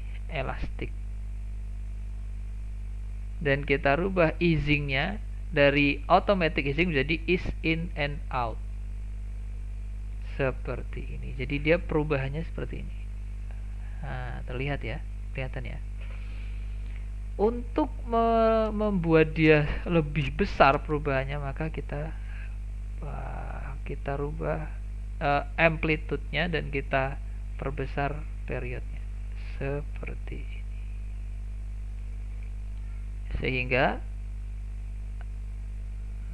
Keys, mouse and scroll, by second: 4.4-7.4 drag, 9.7-10.3 scroll up 6, 10.3-12.1 shift+middle drag, 12.1-15.1 drag, 20.9-24.0 drag, 27.1-30.1 drag, 33.1-36.1 drag.